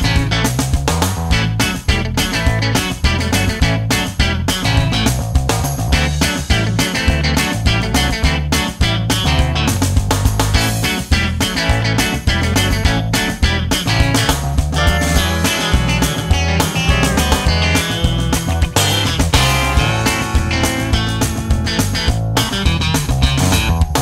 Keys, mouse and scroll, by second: 0.0-1.4 drag, 1.8 g, 4.1-8.0 drag, 9.0-10.7 drag, 10.9-13.5 drag, 14.5 click, 18.3 F12, 19.7-21.8 drag, 22.7-24.0 middle drag.